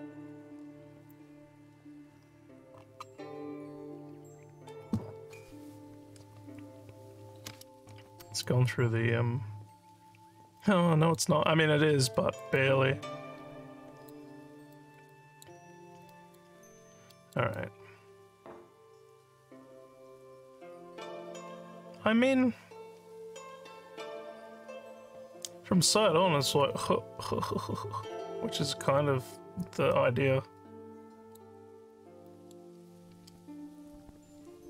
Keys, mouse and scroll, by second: 8.1 alt+scroll up 2, 8.4-11.1 alt+drag, 11.4 alt+scroll up 2, 12.2 alt+middle click, 12.6-14.1 alt+drag, 14.4 scroll down 2, 14.8 alt+middle click, 15.1 alt+click, 15.7 scroll down 1, 16.1 alt+middle click, 16.5 alt+scroll down 2, 17.1 alt+middle click, 17.6-31.4 alt+drag, 31.8 scroll up 2, 32.3 alt+middle click, 33.8 click.